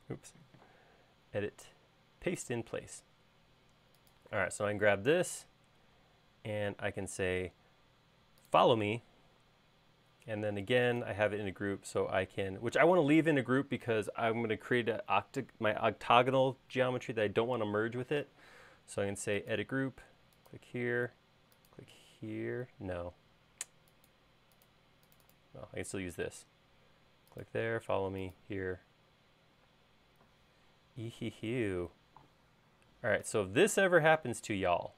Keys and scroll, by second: 0.3 space, 23.0 space, 29.7 space.